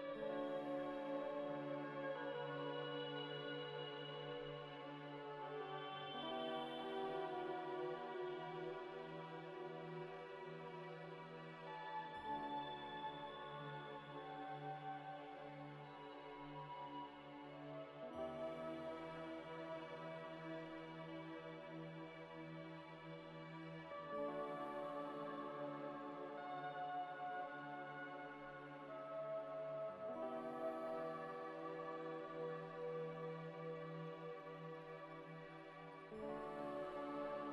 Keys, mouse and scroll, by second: 0.5 double click, 1.0 0, 1.1 ., 1.5 5, 1.7 Return, 2.3 scroll up 1, 3.6-4.8 typing, 4.8 Return, 5.5 Tab, 5.7 Tab, 5.9 Tab, 6.2 scroll down 1, 8.1 z, 8.6 z, 8.9 scroll down 1, 9.7 scroll up 1, 22.4-23.0 typing, 23.0 Return, 27.0 ctrl+s, 29.4 alt+Tab, 30.2 alt+Tab, 33.0 F3, 33.8 c, 33.9 o, 34.0 l, 34.3 r, 34.6 Return, 36.5 scroll up 1, 36.9 z, 37.2 middle click.